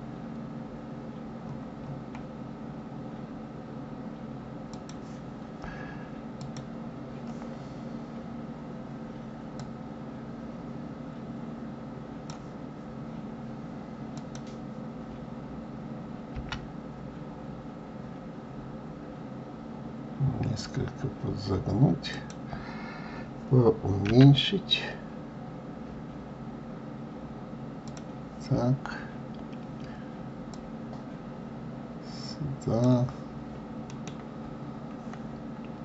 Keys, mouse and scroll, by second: 6.4 click, 7.9-9.5 scroll up 1, 9.5 click, 14.1 click, 15.5-16.0 scroll up 1, 16.0 scroll down 1, 16.3 g, 30.5 click, 33.9 middle click.